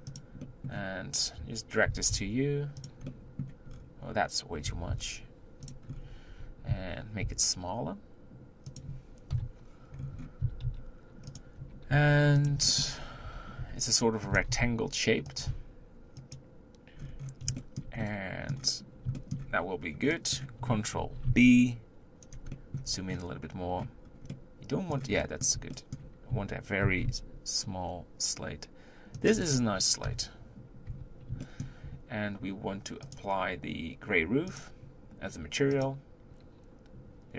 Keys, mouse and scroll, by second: 0.4-1.9 middle drag, 1.9 g, 3.2 middle click, 3.7-4.7 scroll down 4, 4.7 g, 5.9-6.3 scroll up 4, 6.3 Tab, 6.8 s, 9.3 KP_1, 10.0-10.4 scroll up 4, 10.4 s, 11.6 Tab, 11.9 g, 12.7-13.0 shift+middle drag, 13.0 scroll up 1, 13.3 Tab, 13.7 s, 14.3 s, 17.0-17.6 scroll down 4, 17.6-19.5 shift+middle drag, 19.5-19.9 scroll up 2, 19.9 scroll down 1, 20.2 middle click, 21.0 ctrl+b, 22.6 middle click, 22.9-24.1 scroll up 2, 24.1 scroll down 1, 24.3-26.8 middle drag, 26.8 ctrl+b, 30.7 KP_1, 30.9 Tab, 31.4-33.2 shift+middle drag, 33.2-34.6 drag.